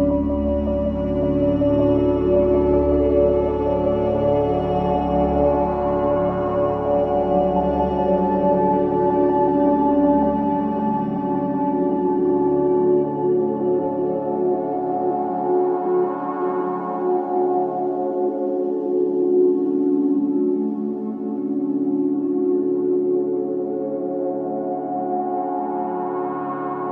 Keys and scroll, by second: 10.1 Delete, 25.4 ], 26.0 ctrl+z.